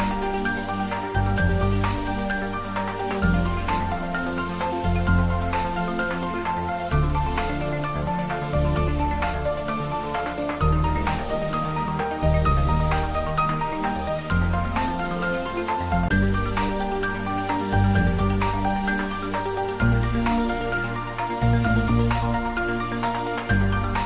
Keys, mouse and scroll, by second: 5.4-5.8 scroll down 1, 5.8-7.0 middle drag, 7.2-7.7 scroll up 1, 7.7-9.3 middle drag, 10.0-12.1 scroll up 1, 12.1 Tab, 14.7 click, 18.4 alt+shift+click, 21.8 click.